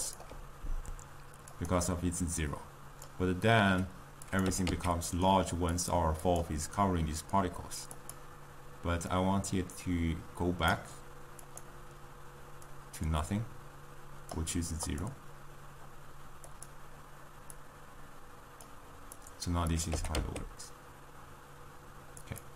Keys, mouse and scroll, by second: 0.0 click, 1.9-4.3 drag, 4.7 g, 6.1 click, 8.3-15.3 drag, 17.7 click, 19.1 drag, 19.6 click, 20.1 g.